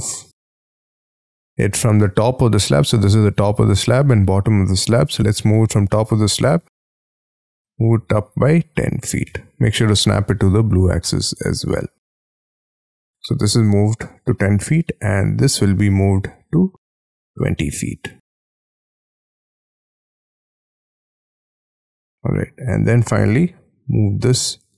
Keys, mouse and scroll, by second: 0.7-5.6 scroll up 26, 5.6-7.6 scroll down 26, 7.6 Up, 8.8 1, 9.2 0, 10.0 ', 11.0 Return, 12.0 scroll down 2, 12.3 space, 12.4 middle click, 16.0 m, 17.3 Up, 18.9 2, 19.2 0, 20.3 Return, 20.3 ', 21.1 middle click, 22.9 space, 23.0 middle click, 24.6 m.